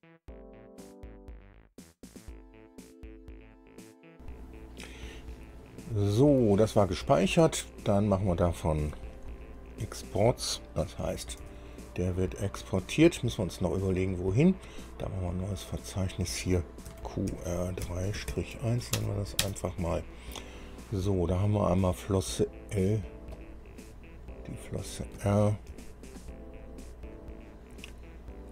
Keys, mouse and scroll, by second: 8.1 click, 11.5 ctrl+e, 15.8 click, 17.0-18.4 typing, 19.1 Return, 19.5 Return, 23.4 click, 24.7 click, 25.8 ctrl+e, 27.1 click.